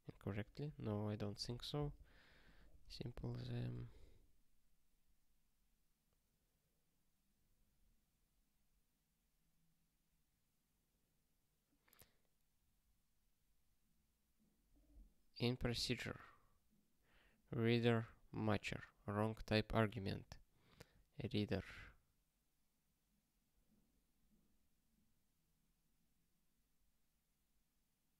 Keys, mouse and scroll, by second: 2.4 click, 2.8 ctrl+space, 2.9 ctrl+a, 3.1 alt+;, 3.4 ctrl+s, 4.0 ctrl+k.